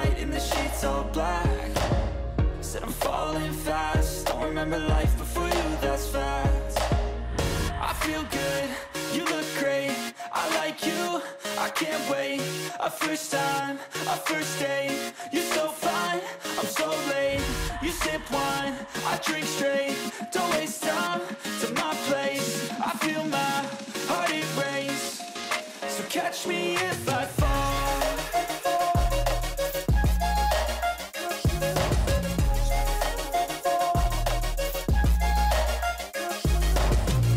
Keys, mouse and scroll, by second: 4.7 ctrl+=, 5.1 ctrl+=, 6.3 ctrl+a, 8.3 5, 11.0-11.8 typing, 11.8 Return, 14.7-16.8 typing, 19.7-21.4 typing, 21.4 Return, 23.9 6, 24.7 Return, 29.2 BackSpace, 29.4 8, 30.0 Return, 34.7 Delete.